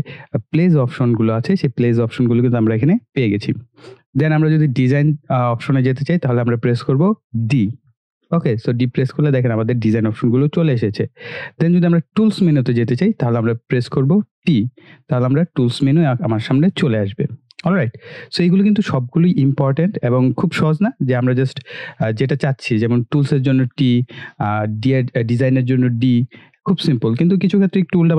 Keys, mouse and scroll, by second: 4.9 click, 11.6 click, 13.9-14.8 typing, 17.8 click.